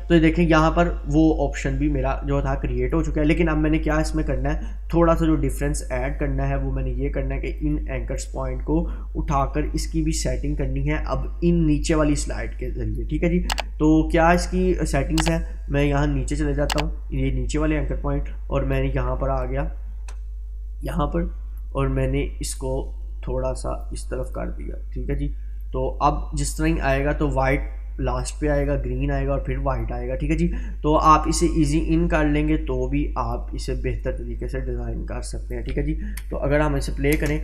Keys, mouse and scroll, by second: 7.6 click, 11.9-13.1 drag, 15.4-17.3 drag, 19.0-21.9 drag, 22.6-24.1 drag, 31.3-33.5 click, 36.2 space.